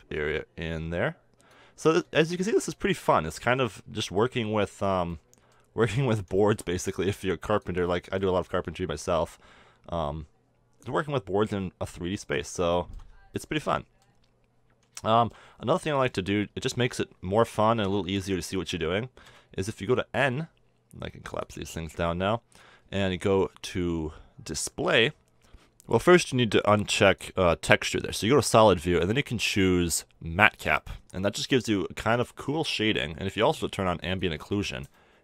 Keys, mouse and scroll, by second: 2.2-2.7 drag, 3.9 KP_1, 8.1-10.8 drag, 11.5-19.7 middle drag, 19.7 n, 21.8-24.9 drag, 24.9-25.3 middle drag, 25.3 click, 27.0-29.0 drag, 30.5 click, 31.1 middle click, 31.5-34.1 middle drag, 34.1-35.1 drag, 34.9 middle click.